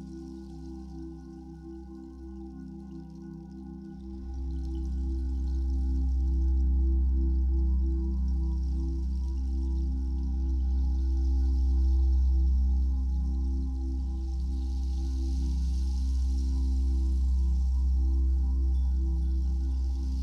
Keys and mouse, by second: 1.4 ctrl+s, 2.4 click, 4.0 click, 4.6 click, 5.6 click, 7.1 click, 8.0 ctrl+s, 9.1 click, 9.8-19.5 drag, 16.8 space.